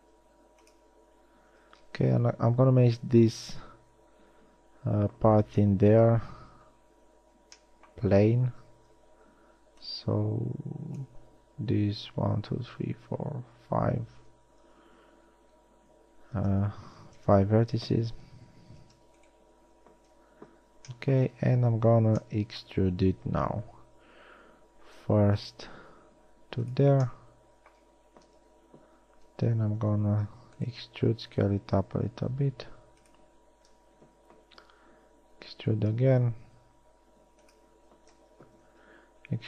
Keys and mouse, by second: 0.6 s, 2.2-4.0 drag, 6.0 KP_3, 9.6 a, 10.0 b, 16.7 s, 20.6 KP_1, 21.6 middle click, 24.6 e, 28.9 KP_3, 30.6 e, 31.6 s, 34.4 KP_1, 35.4 e, 38.6 KP_3.